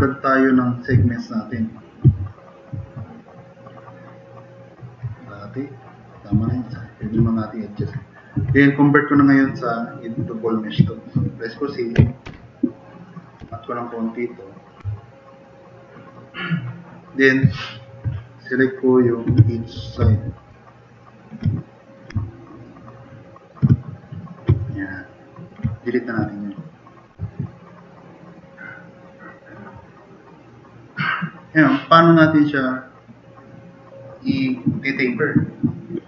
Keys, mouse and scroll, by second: 2.2-3.8 drag, 6.6 drag, 7.7 click, 8.7 middle click, 9.6 middle drag, 10.1 middle drag, 12.0 c, 12.3 c, 12.9 click, 13.2 click, 13.4 e, 14.9 drag, 15.0-15.4 drag, 16.1-16.9 drag, 17.8 click, 18.2-18.5 drag, 20.2-20.6 drag, 21.0-21.4 drag, 21.9 click, 22.3 drag, 23.2 drag, 24.2 click, 24.5 click, 27.3 drag, 27.7 click, 28.3-29.3 middle drag.